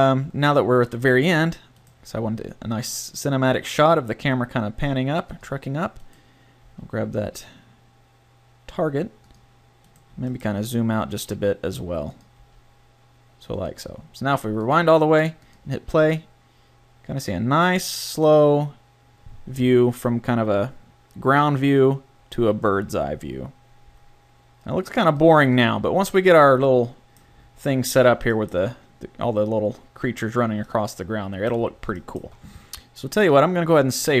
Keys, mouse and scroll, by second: 1.7-2.8 right drag, 2.2 g, 6.0 click, 6.6 g, 9.5 click, 10.3 g, 12.3 g, 14.7-17.1 drag, 25.1 click, 26.7 middle click, 30.9 middle click, 31.3 middle click, 31.5 middle click, 33.2-34.2 middle drag.